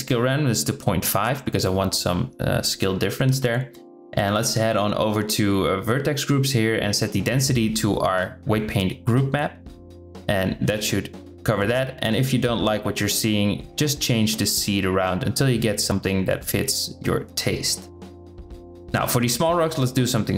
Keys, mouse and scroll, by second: 5.8-7.2 drag, 14.0 click, 14.6 click, 14.9 click, 18.6 click, 20.2 click.